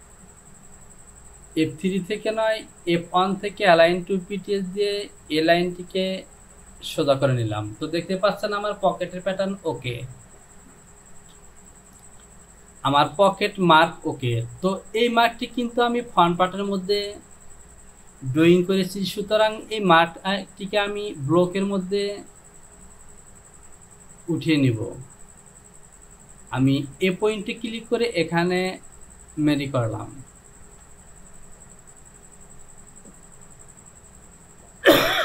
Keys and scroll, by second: 12.4 Home, 18.8 j, 30.8 Return.